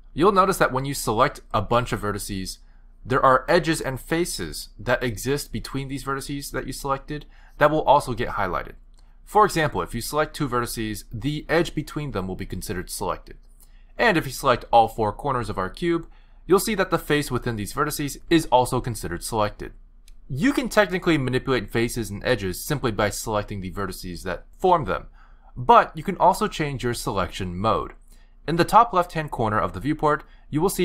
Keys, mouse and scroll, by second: 1.3 shift+click, 2.3 shift+click, 3.5 shift+click, 5.8 s, 6.9 r, 11.1 click, 11.9 shift+click, 13.5 r, 15.6 shift+click, 16.3 shift+click, 19.0 s, 22.6 shift+click, 23.1 shift+click, 24.1 g.